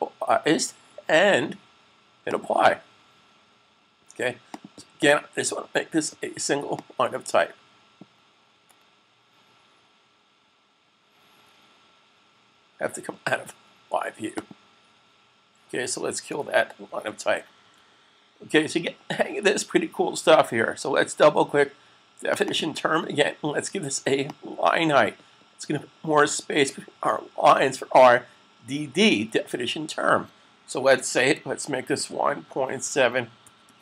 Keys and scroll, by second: 17.5 super+s, 31.6-33.6 typing.